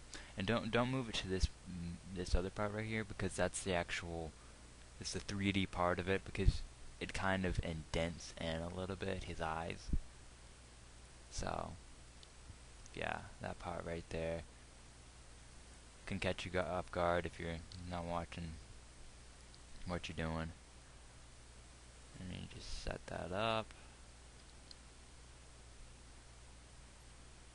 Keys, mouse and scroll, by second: 12.5 g, 18.1 g, 24.9 g.